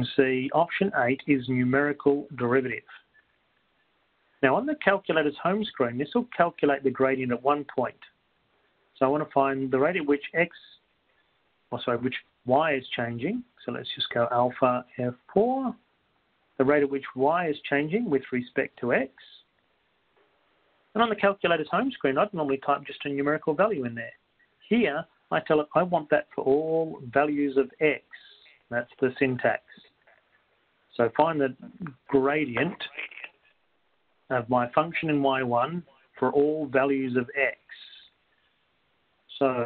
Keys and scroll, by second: 4.4 8, 6.5 x, 16.5 1, 20.2 Right, 27.0-27.7 typing, 30.3 x, 35.4-36.1 typing.